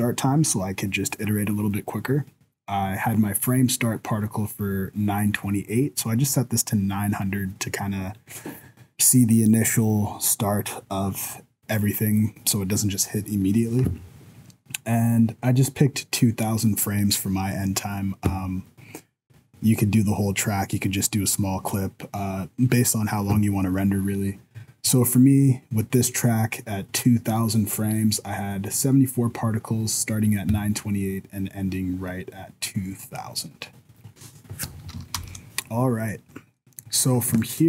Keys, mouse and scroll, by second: 35.1 shift+Left, 35.8 scroll down 5, 36.0-36.6 scroll up 5, 36.6 middle click, 36.9 scroll down 2, 37.5 shift+middle click, 37.5 shift+scroll up 1.